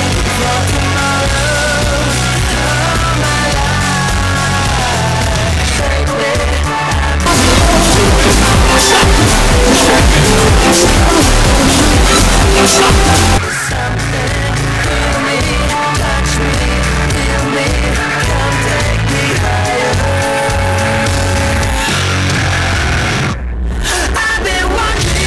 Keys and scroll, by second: 1.1 Return, 13.4 Page_Down.